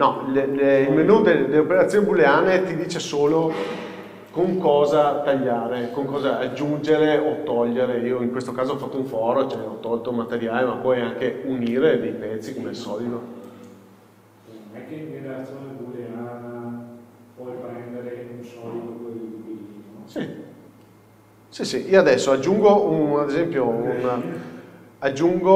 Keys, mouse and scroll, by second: 0.3 Escape, 20.7 scroll down 1, 21.5 scroll up 1, 22.0-22.6 scroll down 1, 22.6 shift+a.